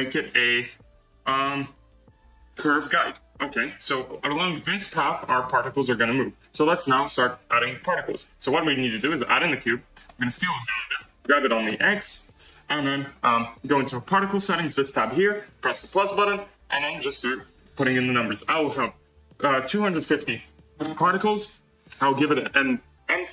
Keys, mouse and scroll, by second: 3.4-3.7 scroll down 1, 3.8 scroll up 1, 3.8-5.8 middle drag, 5.8 scroll down 1, 6.9 shift+a, 10.0 s, 11.1 g, 13.4 click, 15.6-21.5 drag.